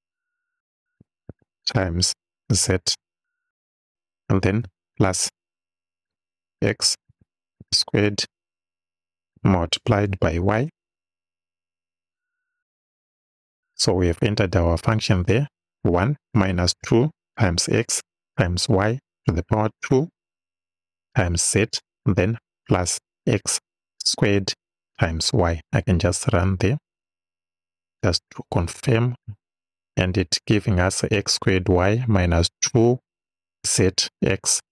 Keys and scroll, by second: 1.3 shift+8, 2.6 z, 5.0 shift+=, 6.5 x, 7.1 shift+6, 7.6 shift+2, 10.0 shift+8, 10.8 shift+y.